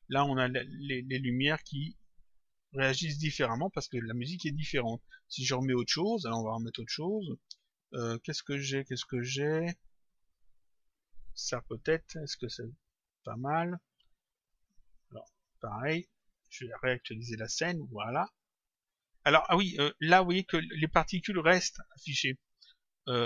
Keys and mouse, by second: 10.5 click, 15.4 click, 22.4 click.